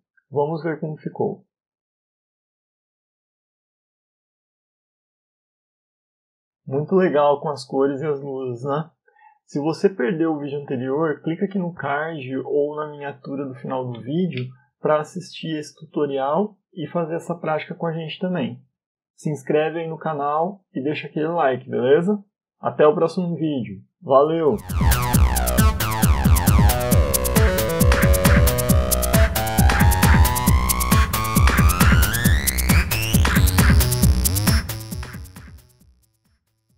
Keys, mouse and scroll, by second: 1.0 click, 1.2 click.